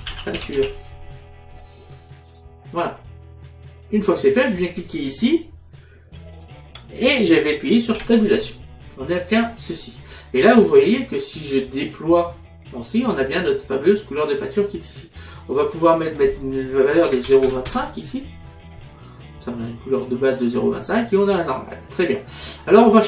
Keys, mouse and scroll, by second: 0.0-0.6 typing, 2.3 click, 4.5 click, 8.0 Tab, 12.0 click, 15.6 click, 17.0 KP_0, 17.1 KP_Decimal, 17.3 KP_2, 17.5 KP_5.